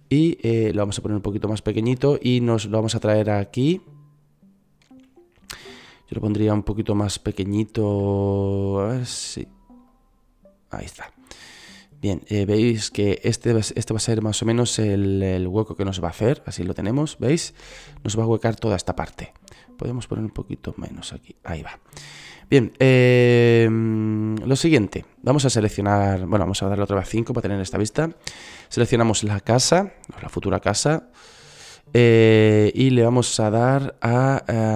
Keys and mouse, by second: 0.5 KP_1, 6.6 right click, 13.0 click, 29.3 KP_5.